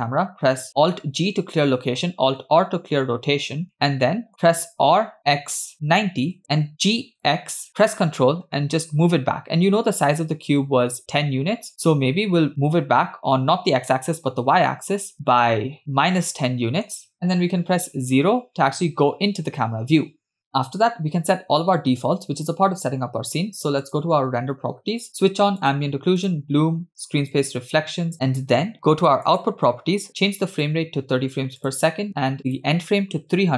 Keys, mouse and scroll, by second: 1.0 alt+g, 2.5 alt+r, 3.8-4.3 middle drag, 4.9 r, 6.8 g, 15.8-17.0 middle drag, 17.7 KP_0, 23.8 click, 25.8 click, 26.3 click, 27.3 click, 29.3 click, 30.6-31.9 drag, 32.4-33.5 drag.